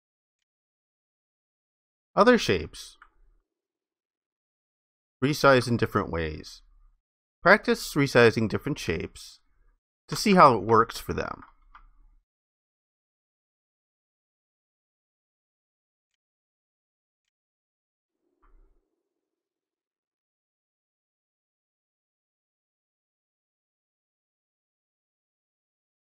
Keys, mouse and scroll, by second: 3.3 alt+click, 6.7 ctrl+shift+click, 8.8 ctrl+shift+click, 10.7 alt+click, 13.7 ctrl+shift+click, 19.8 ctrl+shift+click, 21.5 ctrl+shift+click, 24.0 ctrl+shift+click.